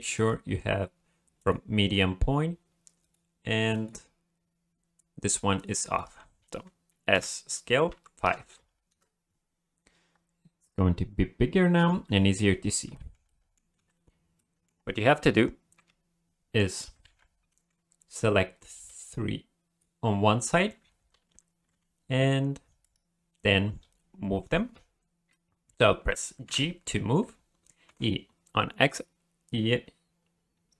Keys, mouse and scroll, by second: 0.1 click, 3.0 click, 3.7 click, 5.6 click, 5.9 right click, 7.1 s, 9.4-10.1 scroll down 4, 10.1 scroll up 1, 11.8 n, 12.5 t, 12.9 shift+middle click, 13.3 middle click, 13.9 ctrl+s, 14.4 middle click, 15.7 KP_7, 16.7 scroll up 1, 17.0 alt+a, 18.2 b, 21.7 b, 26.4 g.